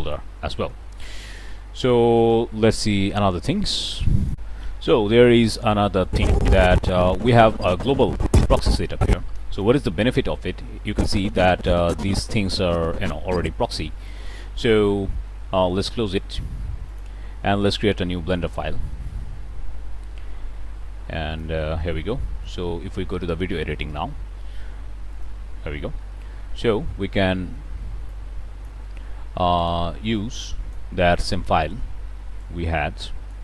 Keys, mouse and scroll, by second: 2.1 click, 3.4 click, 4.1 click, 5.0-5.4 middle drag, 5.9-9.7 drag, 10.7-13.7 drag, 15.6 click, 16.7 click, 18.4 click, 21.2 click, 22.3 click, 25.0 click, 27.9 click, 29.5 click, 30.4 click, 31.1 click, 32.3-33.4 drag.